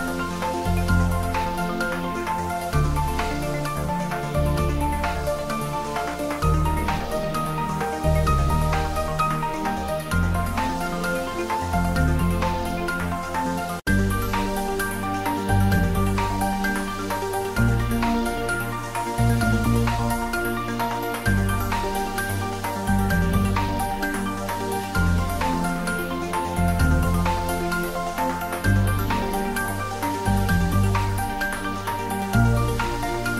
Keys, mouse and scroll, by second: 0.1 ctrl+middle click, 0.7 click, 1.0 shift+z, 1.6-4.4 middle drag, 4.4 click, 4.7 ctrl+s, 4.9 middle click, 5.6 click, 6.0-7.3 typing, 7.6 Right, 8.5 Return, 8.7 ctrl+s, 9.0 ctrl+middle click, 9.3 middle click, 10.2 shift+click, 10.5 shift+middle click, 11.1 shift+click, 12.6 click, 13.8 shift+click, 14.2 ctrl+middle click, 14.8-20.4 typing, 15.8 click, 15.9 shift+middle click, 17.7 click, 19.5 click, 22.5 Up, 23.0 click, 23.6 ctrl+s, 24.2 g, 24.6 z, 24.8 Down, 25.3 Return, 25.5 ctrl+s, 25.8-26.7 typing, 26.8 ctrl+s, 27.7 click, 28.0 shift+z, 28.6 r, 29.4 click, 29.8 g, 30.5 click, 30.8 s, 31.5 click, 31.9 g, 32.5 click, 32.6 ctrl+s.